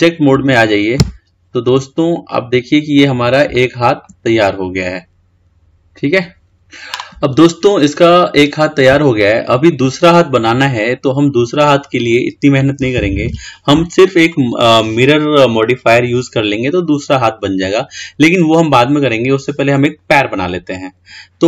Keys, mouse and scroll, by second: 1.1 Tab, 1.9-4.4 middle drag, 4.4 scroll down 1, 4.5-7.0 middle drag, 7.3-10.4 scroll up 2.